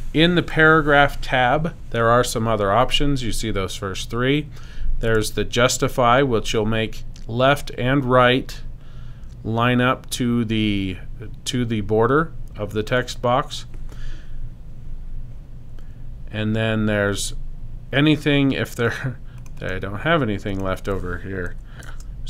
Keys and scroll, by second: 21.5 Right.